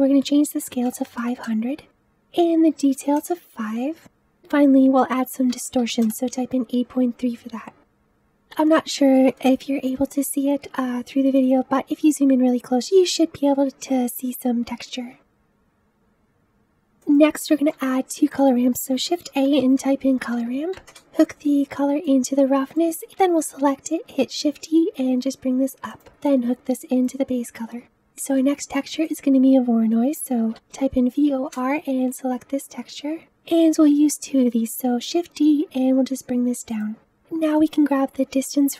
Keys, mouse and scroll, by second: 1.3 KP_0, 3.1-7.8 drag, 7.8-10.1 middle drag, 10.1-10.7 scroll up 1, 10.7-14.7 scroll up 9, 14.7-15.5 scroll down 7, 15.5-15.9 scroll down 5, 16.3-20.9 middle drag, 22.1 click, 22.4-23.7 middle drag, 23.7-25.1 drag, 25.1 shift+d, 27.0 click, 27.9 Delete, 34.9 shift+d.